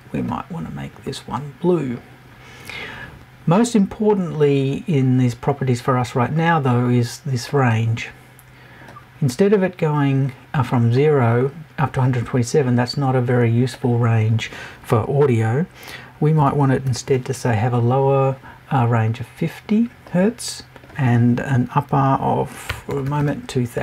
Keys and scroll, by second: 16.4 BackSpace.